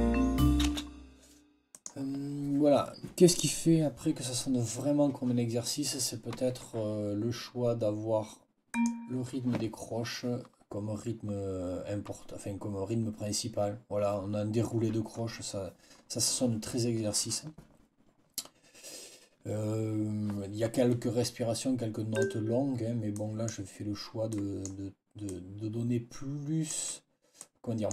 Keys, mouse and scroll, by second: 0.6 space, 1.6 click, 8.6 click, 22.0 click, 23.0 click, 24.2-24.7 scroll up 2, 25.2 scroll down 2, 25.2 scroll up 2, 25.4 scroll down 2.